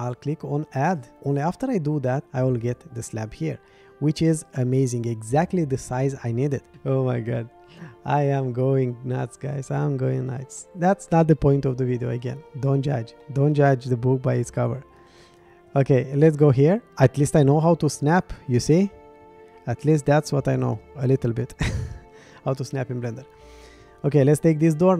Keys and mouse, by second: 0.8 click, 4.5-6.7 middle drag, 10.6-11.4 middle drag, 12.2-12.7 middle drag, 13.2-13.9 middle drag, 15.2 shift+right click, 17.2-18.0 right drag, 18.3-18.9 middle drag, 20.0 shift+click, 21.1-22.7 middle drag.